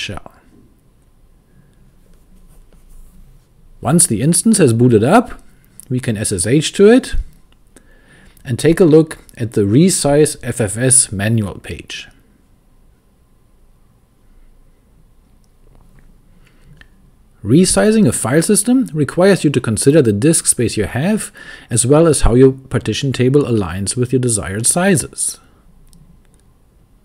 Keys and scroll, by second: 0.0-0.6 typing, 6.0-7.0 typing, 9.0 super+c, 9.4 super+v, 12.0-13.4 typing.